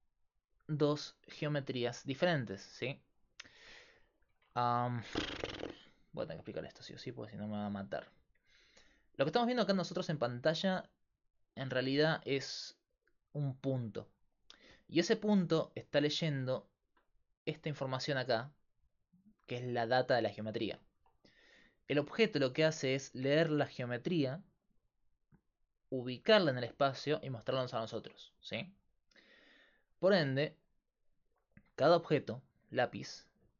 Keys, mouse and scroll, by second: 0.0-33.5 typing, 4.5 Tab, 9.8-16.6 middle drag, 17.4 click, 21.0 Tab, 22.0 right click, 31.4-33.5 drag.